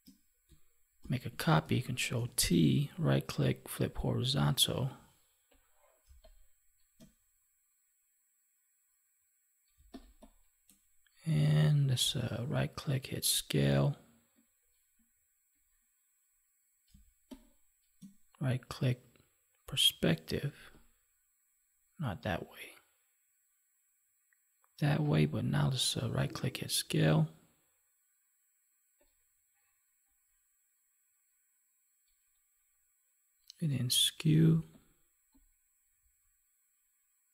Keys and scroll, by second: 2.1 ctrl+t, 6.0 space, 9.7 space, 16.8 space.